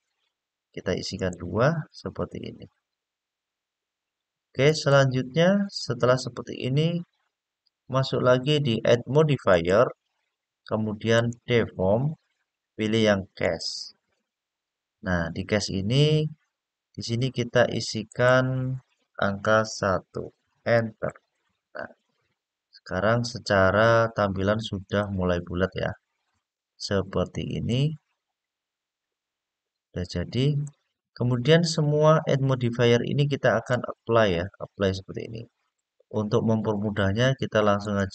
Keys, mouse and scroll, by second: 0.9 click, 4.4 click, 9.2-13.3 drag, 17.8-20.7 drag, 24.6 click, 25.4-26.1 scroll up 4, 26.1-27.5 scroll down 3, 27.5-30.4 middle drag, 33.4-34.5 drag, 37.5 click.